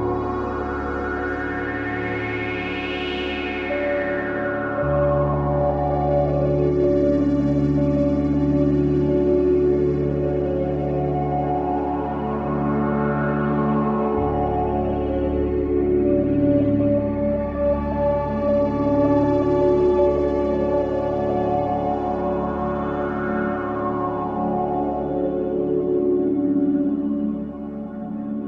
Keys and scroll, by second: 9.3 space.